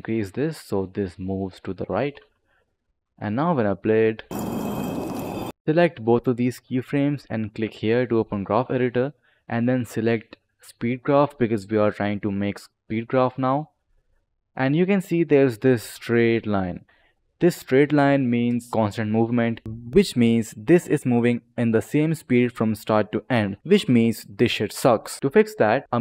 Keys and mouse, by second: 2.8 click, 4.1 space, 5.6 click, 14.1 click, 19.6 ctrl+z, 19.6 click, 25.2 click.